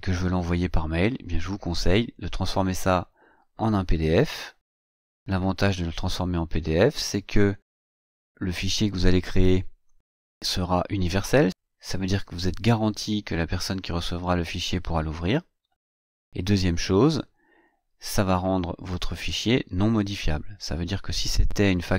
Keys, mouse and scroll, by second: 7.3 click.